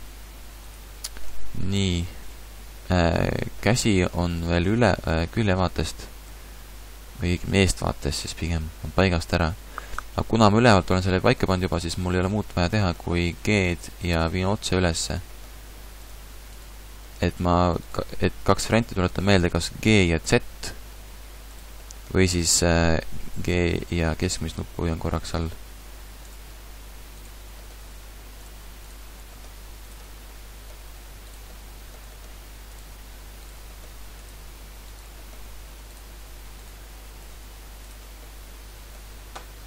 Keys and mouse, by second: 1.3 Tab, 4.2 a, 4.8 a, 4.8 b, 6.3-9.0 typing, 12.6-14.0 drag, 13.4 g, 14.0 middle click, 15.2 g, 17.3 middle click, 19.9 g, 21.8 middle click, 22.0 middle click, 23.3 g, 26.3 click, 27.2 right click, 27.5 g, 28.4 click, 28.9 right click, 29.2 g, 30.4 middle click, 32.1 g, 32.7 click, 33.5 g, 35.1 g, 37.2 g, 37.7 click, 38.6-39.6 middle drag.